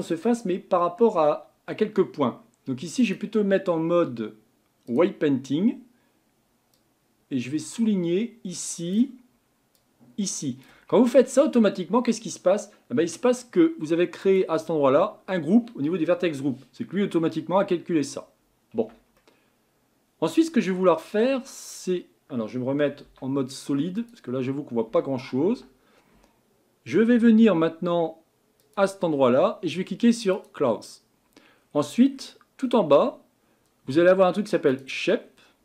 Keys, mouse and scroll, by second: 3.0-14.3 drag, 18.7 Tab, 19.2-21.2 middle drag, 21.2 Tab, 23.0 z, 24.9 Tab, 25.5 Tab, 30.3-31.5 drag, 31.5-33.5 scroll down 16, 33.8-34.5 scroll down 1, 34.7-35.2 drag, 35.2-35.6 scroll down 6.